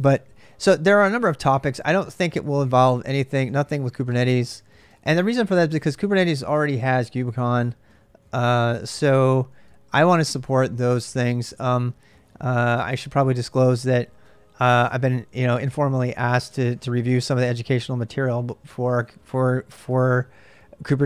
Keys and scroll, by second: 0.5 ctrl+[, 0.6-6.3 typing, 7.5-12.5 typing.